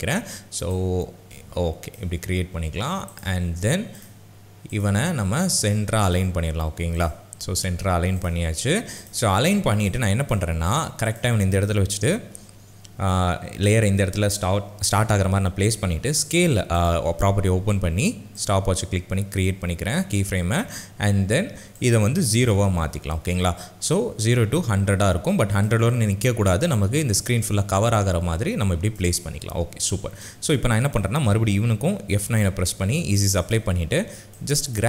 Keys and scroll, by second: 12.2 [, 15.9 s, 22.4 KP_0, 22.8 KP_Enter, 32.4 F9.